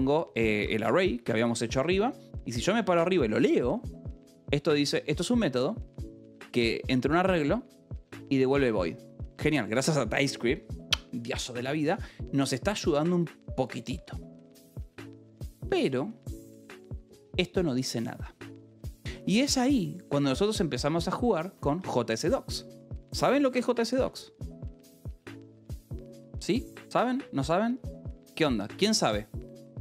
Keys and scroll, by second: 0.0-1.7 typing, 1.5 Escape, 3.4 shift+k, 19.6 Escape, 19.8 k, 21.4 a, 22.9 Return, 25.0 8, 26.3 /, 26.8 BackSpace, 27.2 /, 27.9 BackSpace.